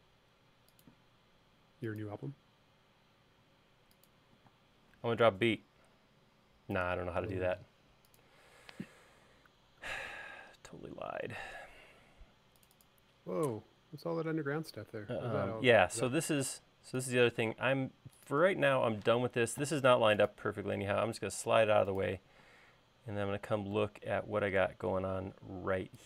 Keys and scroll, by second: 4.6 space, 19.3 m, 22.6 space.